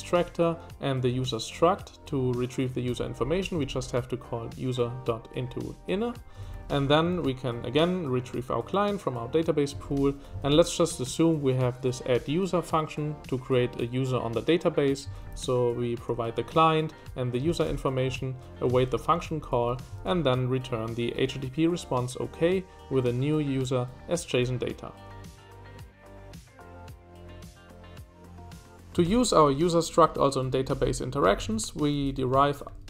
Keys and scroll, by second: 2.8 Escape, 2.9 j, 3.1 j, 3.2 j, 6.3 Escape, 6.4-7.6 typing, 9.7 Escape, 9.8 j, 10.0 j, 15.0 Escape, 15.3 w, 15.5 w, 17.0 w, 17.6 shift+w, 18.0 Escape, 18.9-20.5 typing, 28.5-29.0 typing, 31.4 Escape, 31.7-32.8 typing.